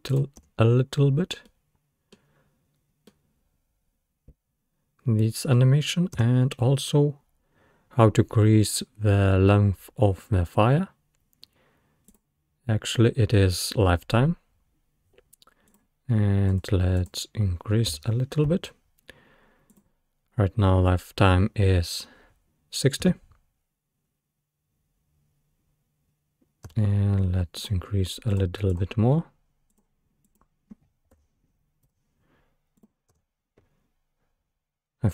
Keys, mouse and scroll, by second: 0.4 space, 1.5-5.7 middle drag, 5.7-6.2 scroll down 1, 6.2 space, 12.1-15.2 drag, 23.1 space, 26.7 space, 27.6 click, 28.7-31.8 drag, 33.2 space.